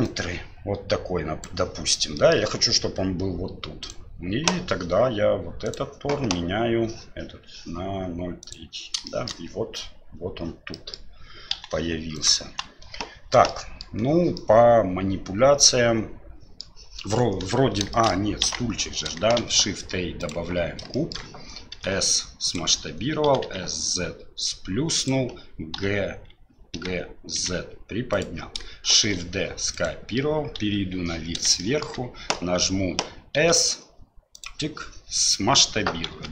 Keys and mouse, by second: 0.0-1.4 drag, 2.2 middle click, 3.8 click, 5.6-8.5 drag, 9.1 shift+middle drag, 10.7 middle click, 11.5 Delete, 12.1 click, 12.5 Delete, 13.5-13.8 middle drag, 14.3-16.6 middle drag, 17.9 shift+middle drag, 18.4 KP_1, 19.4 shift+a, 21.0 shift+click, 21.7 s, 23.3 s, 25.8 f, 26.7 g, 29.0 shift+d, 30.6 KP_7, 31.6 shift+drag, 33.4 s, 36.1 s.